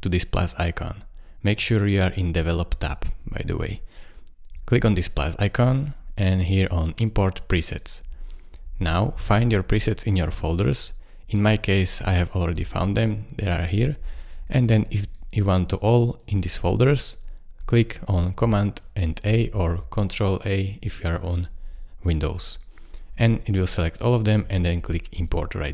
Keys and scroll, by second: 19.2 super+a.